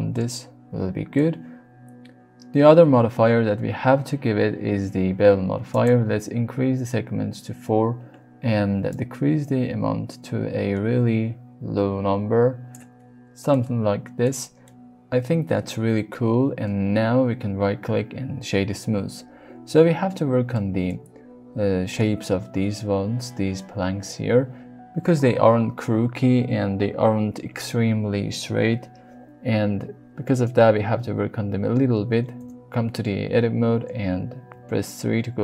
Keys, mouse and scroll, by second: 1.2 click, 5.4-8.3 drag, 8.9-12.7 shift+drag, 13.5-14.2 middle drag, 14.7-16.2 middle drag, 16.8-18.4 middle drag, 20.5 middle click, 32.4 Tab, 34.5 3.